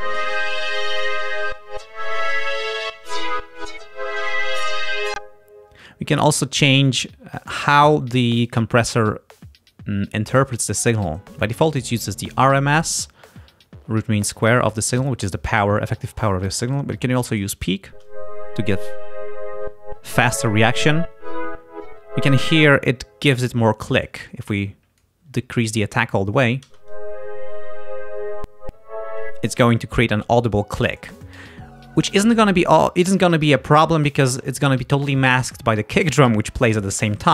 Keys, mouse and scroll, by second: 0.7 click, 5.1 space, 11.0 click, 17.4 click, 17.9 space, 22.6 space, 24.1-25.2 drag, 26.7 space, 29.3 space.